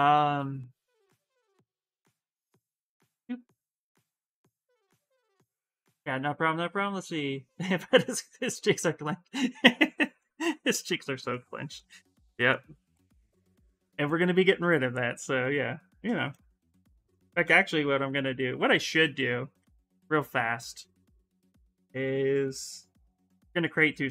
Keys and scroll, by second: 15.9 ctrl+z, 16.7 ctrl+z, 17.4-18.9 typing.